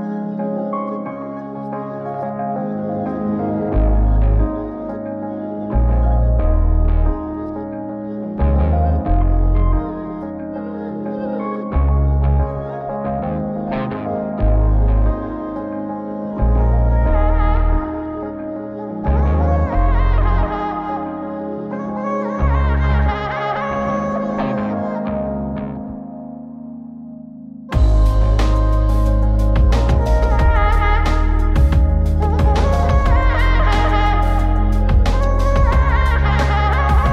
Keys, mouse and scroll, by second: 1.6 click, 1.9 middle drag, 3.9 click, 4.9 click, 5.7-6.0 shift+middle drag, 6.2-6.5 scroll up 3, 6.5-7.5 middle drag, 7.5 scroll down 1, 7.7-8.2 scroll up 1, 8.2 scroll down 2, 8.4 shift+middle click, 8.7 scroll up 3, 9.1 shift+middle click, 9.4 scroll up 2, 10.0 middle click, 10.4 shift+middle click, 10.8 scroll up 2, 11.3-11.7 middle drag, 11.9 shift+middle click, 12.5-12.8 scroll down 3, 12.8 middle click, 13.5 click, 14.5 scroll down 1, 14.7 middle click, 15.3-15.9 scroll up 3, 15.6 middle click, 16.1 click, 16.7 click, 17.1 click, 17.8 scroll down 1, 18.0 middle click, 18.3 click, 18.7 click, 19.4 click, 20.1 click, 20.7 click, 21.9 click, 22.8 click, 23.9-25.1 drag, 25.8 middle click, 28.1 click, 28.1 middle click, 29.2-32.3 drag, 33.7 click, 34.2 click, 35.5 click.